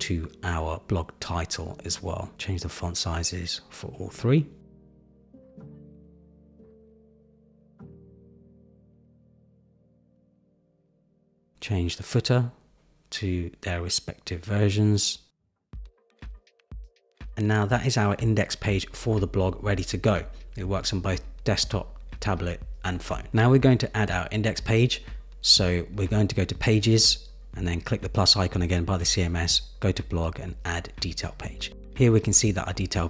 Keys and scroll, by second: 4.0 Return, 5.1 Return, 6.8 super+=, 7.6 super+-.